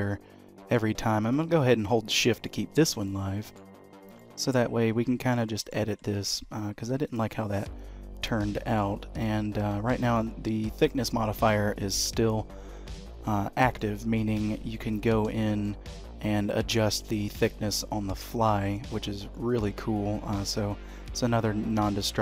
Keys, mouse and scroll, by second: 3.0 middle click, 3.8-4.1 scroll up 3, 4.1 shift+middle click, 5.0-5.5 scroll up 1, 5.5 middle click, 5.9 Tab, 6.9 3, 7.0 click, 9.6 2, 10.0 click, 11.8 click, 13.8 middle click, 15.4 shift+middle click, 19.4 middle click, 21.0 click, 21.6-22.0 scroll up 2, 22.0 shift+middle click.